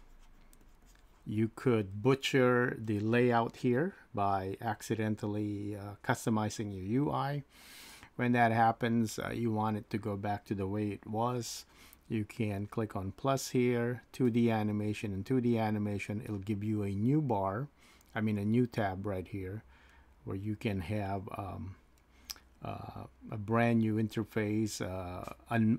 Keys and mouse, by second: 0.4-1.1 typing.